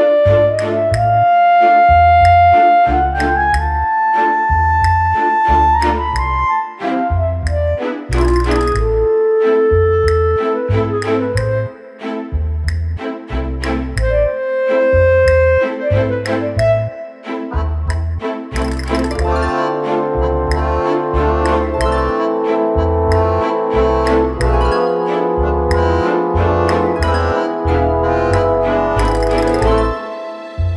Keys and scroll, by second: 3.8 ctrl+j, 20.3 alt+Delete.